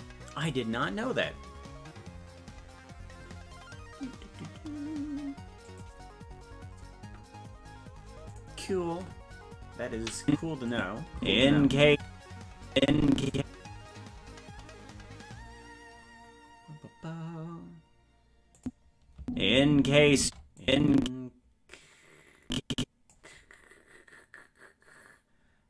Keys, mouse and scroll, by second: 10.2 click, 10.7 click, 11.1 space, 12.7 click, 18.6 click, 19.2 space, 20.6-23.1 drag, 20.6 space.